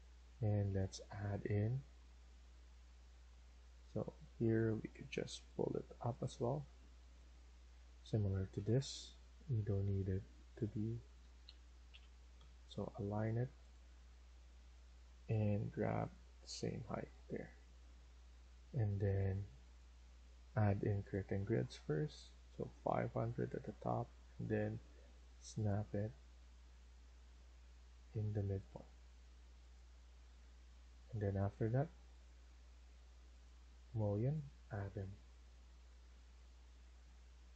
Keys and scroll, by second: 6.9 Escape, 7.6 Escape, 7.9 Escape, 8.4-9.1 typing, 11.1 Escape, 11.4 Escape, 11.7-12.3 typing, 16.5 Escape, 16.8 Escape, 17.1 Escape, 30.5 Escape, 30.8 Escape, 34.5 Escape, 34.8 Escape.